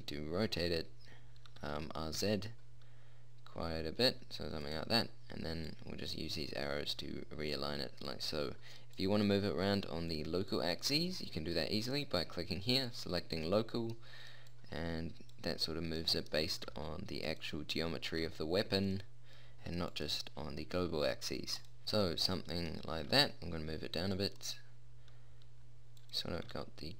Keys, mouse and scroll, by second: 1.9 r, 6.0 click, 14.8 click, 16.9 g, 18.4 r, 20.2-22.3 drag, 22.0 g, 23.3 g, 25.6 r, 26.7 g.